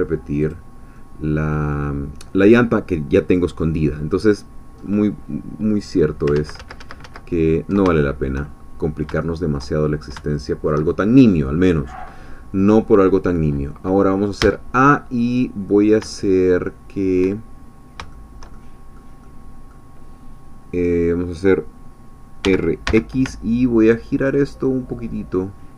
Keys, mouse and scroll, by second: 0.4 click, 1.0 middle click, 4.8-6.2 scroll up 2, 6.3 ctrl+z, 8.0-9.8 ctrl+shift+drag, 9.8 shift+scroll up 2, 10.3-13.0 shift+drag, 14.4 a, 15.4 scroll down 2, 16.1-17.4 shift+drag, 17.6-18.0 shift+scroll up 3, 18.1 shift+click, 18.9-22.4 middle drag, 22.4 r, 22.8 x.